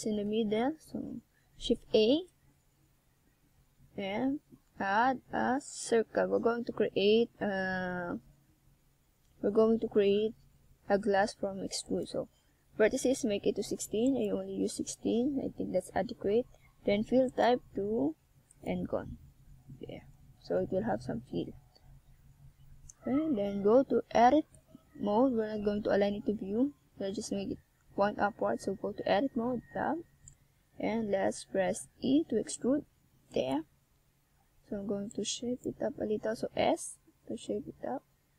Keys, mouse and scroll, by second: 5.3 s, 8.2 click, 9.1 scroll up 1, 9.4 middle click, 11.7 middle click, 12.9 click, 14.6 middle click, 15.9 middle click, 17.4 KP_1, 18.7 click, 21.2 scroll down 1, 21.6 middle click, 23.5 shift+scroll down 1, 24.4 middle click, 29.4-30.3 ctrl+scroll up 1, 30.5 middle click, 32.1 scroll down 1, 34.7 ctrl+alt+KP_0, 36.4 right click, 37.5 g.